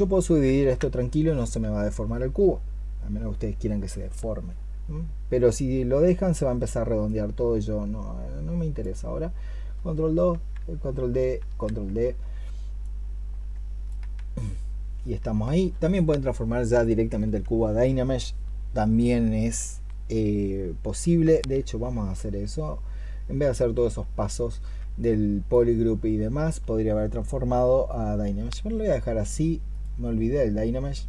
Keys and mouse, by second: 0.3 ctrl+d, 10.2 ctrl+d, 22.5-24.4 ctrl+drag.